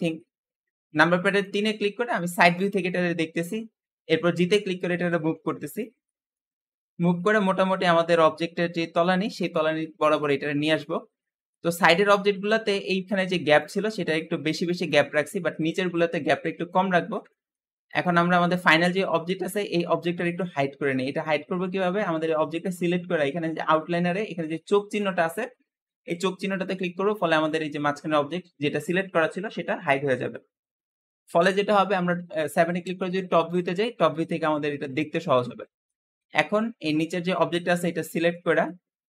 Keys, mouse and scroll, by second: 0.3-0.9 scroll up 2, 0.9-1.3 scroll down 2, 1.3-1.7 shift+middle drag, 1.7-2.8 scroll up 2, 2.8 scroll up 2, 4.2 g, 5.9 shift+middle click, 6.4-6.8 scroll up 2, 6.8 g, 9.6 shift+middle click, 10.3-10.7 scroll up 2, 10.7-11.1 scroll down 2, 11.1 middle click, 11.6-12.2 scroll down 1, 12.2-13.9 scroll up 3, 16.2 middle click, 16.8-17.2 scroll down 1, 17.2 shift+middle click, 17.8 click, 26.2 click, 27.1-30.1 middle drag, 31.2 click, 32.7 KP_7, 33.5-34.0 scroll up 2, 34.0-34.7 shift+middle drag, 34.7-35.3 scroll up 2, 35.7-36.8 shift+middle drag, 36.8-37.9 scroll down 2, 37.9-39.0 shift+middle drag.